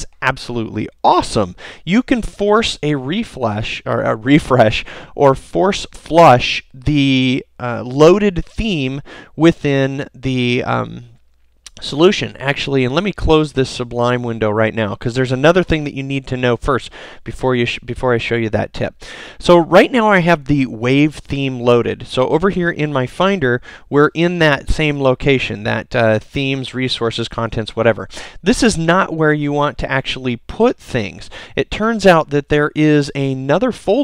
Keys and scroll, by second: 10.8 super+s.